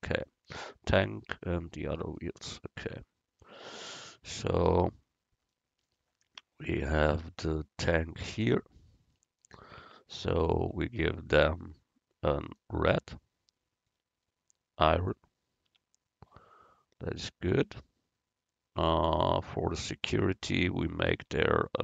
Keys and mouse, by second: 8.1-9.2 right drag, 9.2-10.7 middle drag, 10.7 Tab, 15.8 Tab, 20.1 Tab, 21.3 Tab.